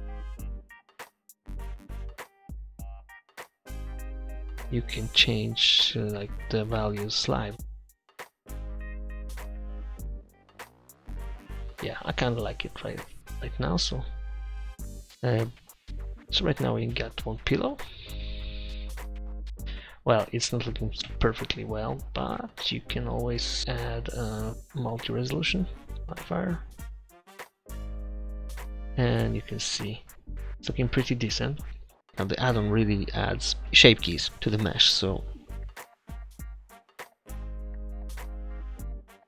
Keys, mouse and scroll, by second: 7.3 click, 9.3 middle click, 11.5-13.4 drag, 16.4 Delete, 26.4-29.5 drag, 29.5-30.5 middle drag, 33.6-36.8 drag, 36.8-38.2 middle drag, 38.2-39.2 right drag.